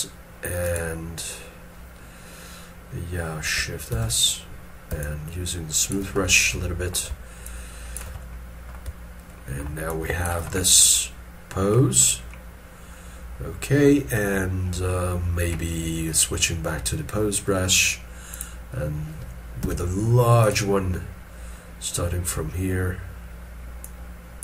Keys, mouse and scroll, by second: 3.9 shift+s, 5.0 shift+click, 6.2 middle click, 7.4 shift+click, 8.2 middle click, 9.3 shift+middle click, 10.6 middle click, 12.0 scroll down 1, 19.6 f.